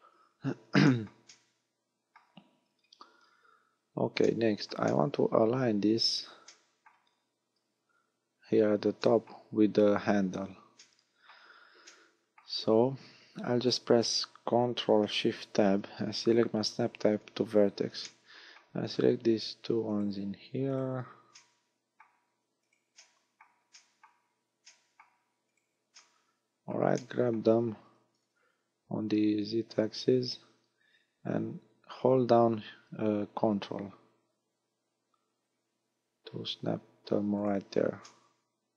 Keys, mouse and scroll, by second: 0.2-0.6 scroll up 6, 0.9 shift+middle click, 1.3 middle click, 2.7-3.4 scroll down 8, 4.3 shift+middle click, 4.9 middle click, 5.9-6.2 scroll up 5, 6.5 shift+middle click, 7.2-8.1 scroll up 5, 9.1 shift+middle click, 10.8 middle click, 11.9 middle click, 15.5 ctrl+shift+Tab, 18.1 middle click, 19.9 right click, 20.7 shift+right click, 21.4 middle click, 22.7 right click, 23.0 middle click, 23.8 shift+middle click, 24.7 middle click, 25.5 shift+right click, 26.0 middle click, 27.0 shift+middle click, 28.3 g, 37.5 ctrl+click, 38.1 middle click.